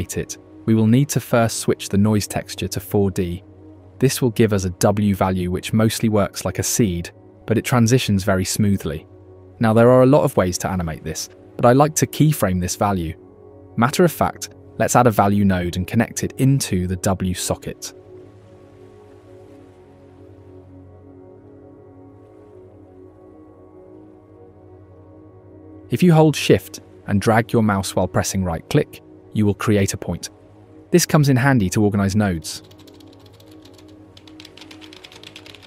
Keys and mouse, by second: 0.3-1.3 middle drag, 3.4-4.9 middle drag, 6.3 middle click, 7.4-8.3 drag, 9.9-13.3 shift+middle drag, 14.5 middle click, 15.3-15.7 middle drag, 16.1 click, 17.2 click, 18.3 shift+a, 23.4-25.2 drag, 28.7 shift+click, 30.7 g, 32.8 click, 33.0-34.6 typing, 33.4 click, 33.6 shift+click, 34.1 shift+click, 34.4 shift+click, 34.5 ctrl+z, 34.5 shift+click, 35.0 click, 35.2 ctrl+g, 35.4 ctrl+g.